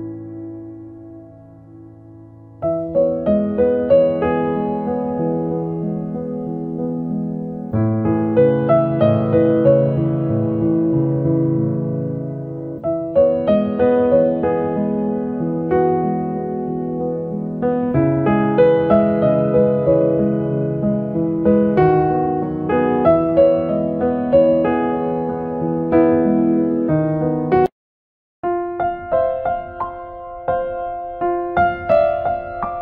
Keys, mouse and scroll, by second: 0.5 click, 2.2 click, 2.8 middle click, 3.4 ctrl+right click, 3.8 right click, 5.0 click, 6.4 click, 7.1 f, 7.3 click, 8.8 ctrl+z, 8.8 middle click, 9.1 middle click, 9.6 ctrl+right click, 10.3 middle click, 11.4 ctrl+right click, 12.0 right click, 12.3 ctrl+right click, 12.8 f, 13.1 click, 14.5 shift+click, 15.5 click, 15.8 f, 16.4 click, 17.2 f, 17.4 click, 19.6 click, 21.1 middle click, 21.2 middle click, 21.7 right click, 22.1 ctrl+right click, 22.7 click, 24.2 click, 24.5 click, 26.2 click, 27.1 click, 28.1 middle click, 28.7 click, 30.0 click, 30.0 f, 30.9 click, 31.8 f, 32.1 click.